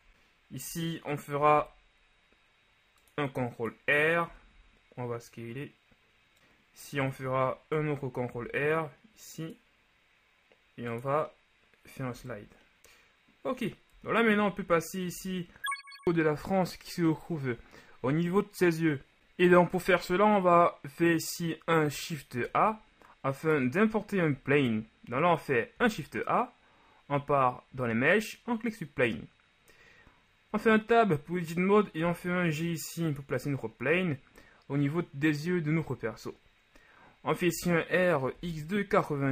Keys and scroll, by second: 1.4 ctrl+r, 4.5 shift+s, 7.2 Tab, 8.3 r, 12.8 Tab, 14.0 KP_1, 14.6 a, 15.2 a, 24.4 a, 25.8 shift+a, 30.6 Tab, 32.0 g, 37.5 r, 38.5 KP_9, 38.9 KP_0, 39.1 Return.